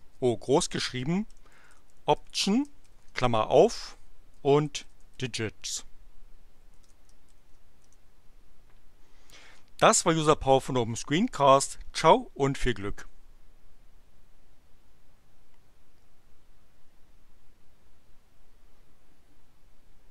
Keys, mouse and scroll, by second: 1.0-2.8 typing, 4.1-5.6 typing, 7.2 shift+9, 7.8 shift+Return.